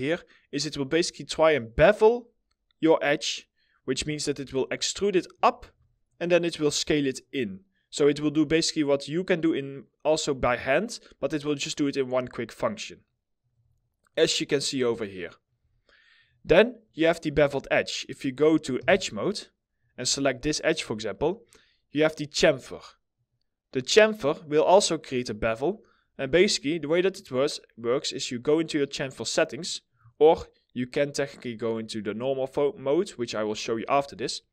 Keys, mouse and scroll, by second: 4.2 alt+middle click, 13.3 alt+middle click, 14.4 scroll, 14.5 alt+middle click, 14.5 scroll down 1, 14.8 middle click, 15.2 alt+middle click, 18.3 2, 19.9 alt+middle click, 20.3 middle click, 33.1 middle click.